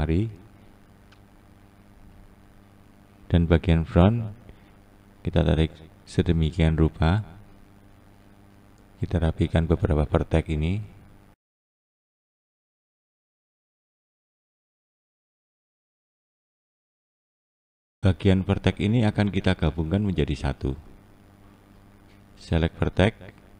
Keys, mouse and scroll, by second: 3.0 click, 4.5 click, 5.0 click, 9.6 click, 10.1 click, 11.5 click, 11.6 click, 11.9 click, 12.0 click, 12.8 click, 13.2 click, 13.3 click, 14.2 click, 14.3 click, 14.8 click, 15.2 scroll up 1, 15.3 click, 15.5-15.8 scroll down 4, 15.8 scroll up 1, 16.1 click, 16.3 click, 16.7 click, 16.8-17.5 scroll up 1, 17.5 scroll up 2, 17.6 scroll down 1.